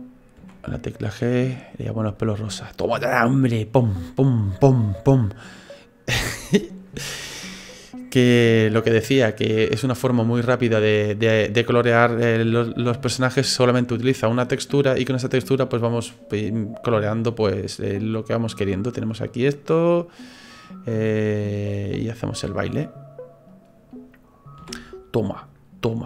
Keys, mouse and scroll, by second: 0.4 g, 2.7 right click, 3.0 middle click, 4.0-5.0 scroll down 5, 4.8 middle click, 5.5 middle click, 6.6-7.0 scroll up 3, 7.0 shift+middle click, 7.6 middle click, 10.4 click, 12.5 middle click, 14.6 middle click, 19.0 click, 19.9 right click, 20.3 right click, 21.5 click, 22.4 click, 23.6 right click, 24.6 g.